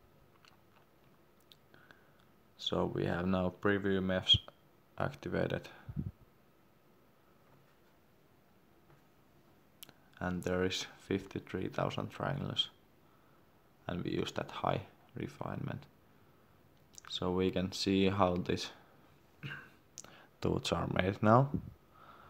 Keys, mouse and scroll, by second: 12.6-14.6 scroll down 1, 14.7 middle click, 15.1-15.6 scroll down 1, 17.9 middle click, 18.8 scroll down 1.